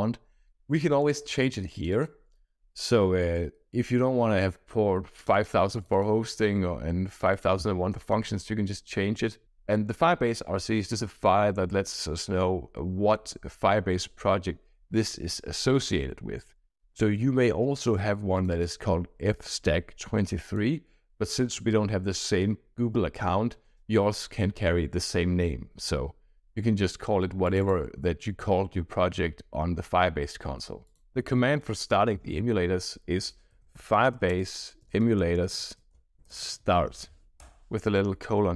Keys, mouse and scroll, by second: 0.7 click, 1.7 click, 3.3-4.2 scroll down 2, 5.1 click, 5.7 click, 7.1 click, 7.9 click, 18.3 click, 18.5 click, 20.4 click, 27.4 click, 30.8 click.